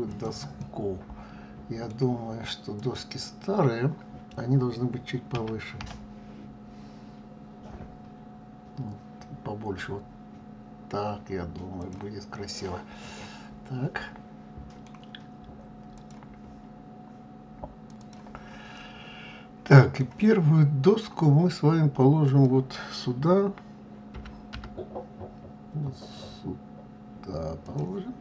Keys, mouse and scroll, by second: 0.6-2.8 middle drag, 2.8 click, 5.3 s, 12.3-15.3 middle drag, 18.7-21.7 middle drag, 22.2 click, 24.1 g, 28.1-28.2 middle drag.